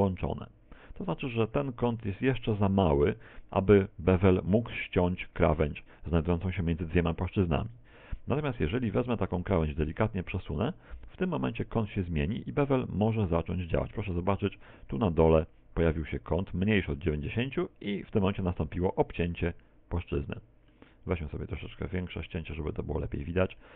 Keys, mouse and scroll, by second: 0.6 scroll down 1, 1.2 shift+middle click, 9.3 right click, 10.1 right click, 10.5 shift+right click, 11.9 shift+right click, 12.8 click, 17.9 middle click, 19.7 click, 21.1 middle click, 21.5 middle click.